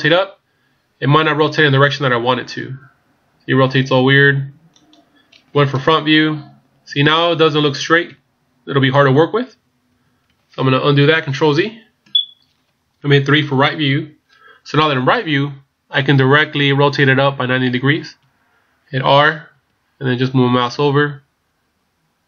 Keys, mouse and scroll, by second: 1.8 r, 5.8 KP_1, 8.1 KP_3, 9.9 KP_1, 11.6 ctrl+z, 13.8 KP_3, 19.5 r.